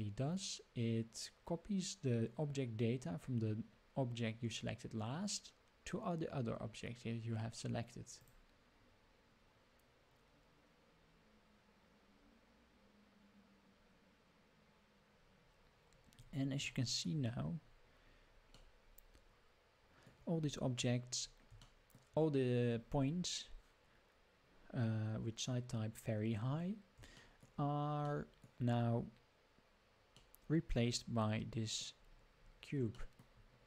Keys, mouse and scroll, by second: 15.6 scroll down 1, 16.7-17.1 shift+middle drag, 17.3 scroll up 4, 18.0 scroll up 2, 18.6-19.7 middle drag, 19.7-20.1 middle drag, 20.4 scroll down 3, 21.3 scroll down 3, 21.7 shift+middle drag, 22.8 scroll up 4, 26.5-26.9 scroll down 4, 27.2 shift+middle drag, 28.1-28.4 middle drag, 28.7 scroll up 4, 30.2-31.8 middle drag, 32.0 scroll up 3, 32.4 scroll down 4, 32.9 shift+middle drag.